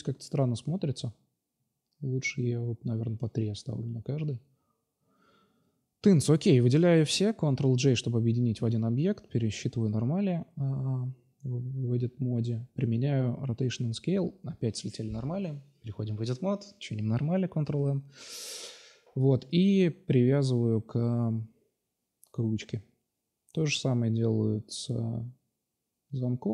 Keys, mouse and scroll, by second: 3.1-4.8 middle drag, 5.0 middle drag, 5.4-7.0 right drag, 7.1 ctrl+j, 7.7 Tab, 8.4 a, 8.5 a, 8.7 ctrl+n, 9.0 Tab, 9.8 right click, 11.4 ctrl+j, 12.0 ctrl+z, 12.3 ctrl+a, 13.1 Tab, 13.6 a, 13.7 a, 14.2 Tab, 14.6 click, 14.8 Tab, 15.7 ctrl+n, 16.0 Tab, 16.4-16.7 middle drag, 18.1 right click, 18.6 ctrl+j, 19.8-20.3 right drag, 22.6 ctrl+j, 23.1 ctrl+a, 25.1-26.5 drag.